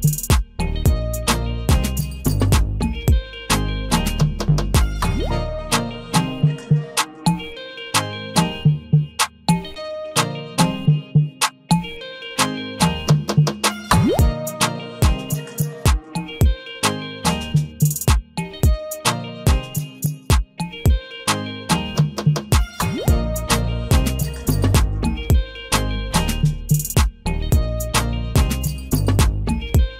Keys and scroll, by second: 11.8 ctrl+t, 28.8 ctrl+a.